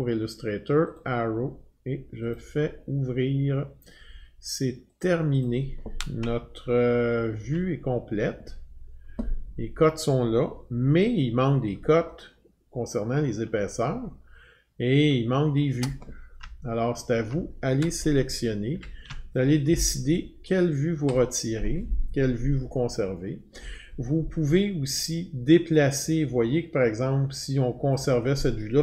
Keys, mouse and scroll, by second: 1.0 click, 2.3 click, 5.0 click, 5.4 click, 6.3-7.0 alt+scroll, 7.8 scroll, 12.6-13.4 scroll, 15.8 click, 16.7 alt+middle click, 18.7 ctrl+alt+3, 21.1 click, 27.9 click.